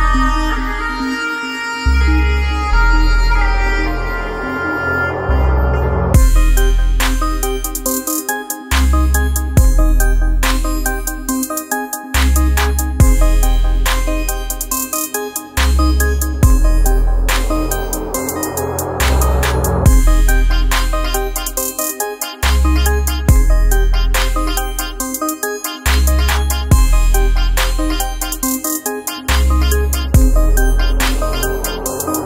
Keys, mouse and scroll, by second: 1.0 click, 2.3-8.5 alt+drag, 9.6 ctrl+a, 13.0 ctrl+a, 13.2 shift+m, 18.1 click, 20.7-25.6 drag, 29.4 ctrl+a, 31.9 ctrl+a, 32.1 shift+w.